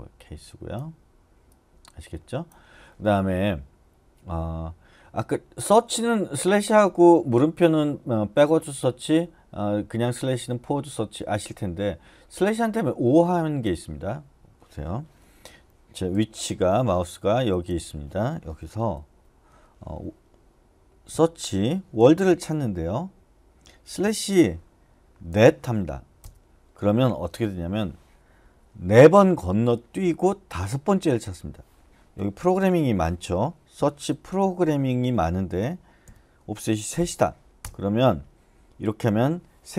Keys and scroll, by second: 19.1-19.5 typing, 20.9-25.8 typing, 26.2 Return, 33.5-36.9 typing, 37.6 Return.